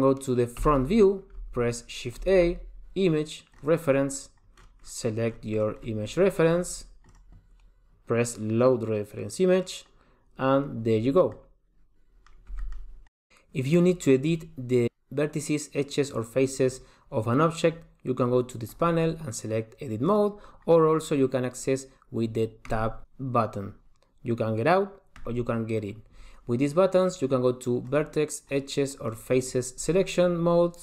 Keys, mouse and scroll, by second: 0.8 KP_1, 2.4 shift+a, 11.5 middle click, 12.7 g, 18.9 click, 22.9 Tab, 25.4 Tab, 28.1 click, 28.7 click, 29.3 click.